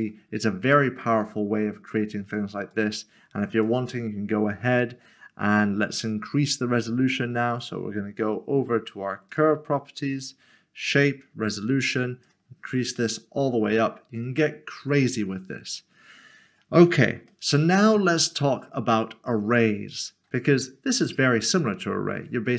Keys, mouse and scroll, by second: 1.0 middle click, 2.7 click, 7.5 click, 13.0 middle click, 21.0 middle click.